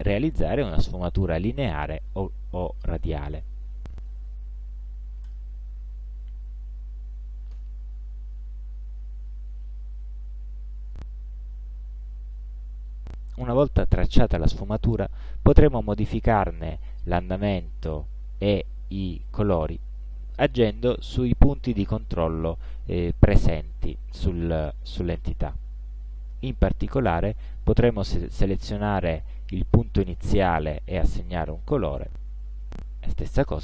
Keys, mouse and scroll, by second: 7.4 click, 9.6-11.6 drag, 12.7-14.5 drag, 15.8-17.1 drag, 18.1 click, 20.0 click, 28.9 click, 31.5 click, 33.1 click.